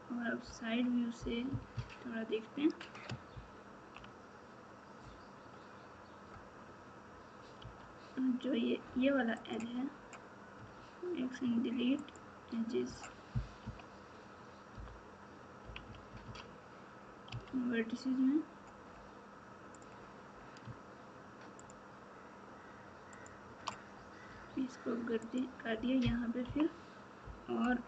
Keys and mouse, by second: 1.4 KP_6, 1.7 KP_6, 3.3 ctrl+KP_2, 5.0 KP_2, 7.6 2, 9.3 click, 13.6 KP_3, 14.7 KP_4, 15.6 KP_6, 15.8 KP_6, 17.2 1, 21.6 shift+click, 23.2 shift+click, 24.2 f, 26.4 KP_3.